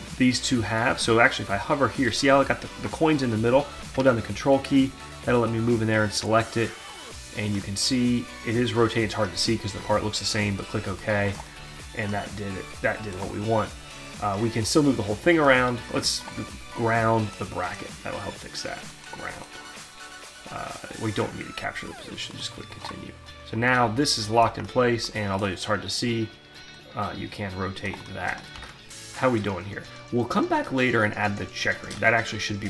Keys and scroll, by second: 28.1 alt+Tab.